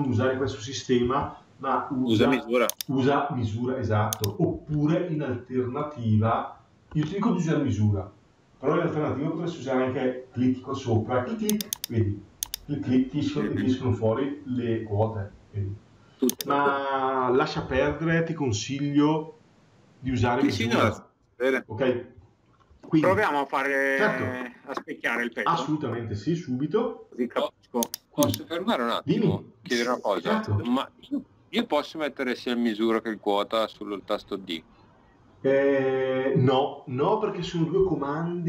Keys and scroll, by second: 0.8 Delete, 4.5 Escape, 17.4 Escape, 22.6 Escape.